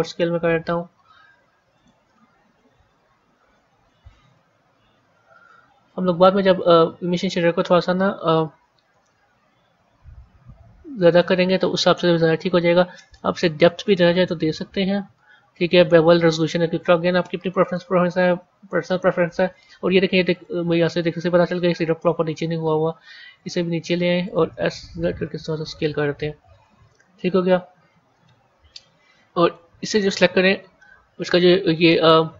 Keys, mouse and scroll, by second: 2.5 KP_1, 2.9 KP_3, 4.3 a, 6.5 click, 8.0 g, 13.8-17.0 drag, 17.5 a, 20.2 click, 21.4 g, 24.4 s, 26.3 a, 29.3 click, 30.4 Tab, 31.8-32.3 middle drag.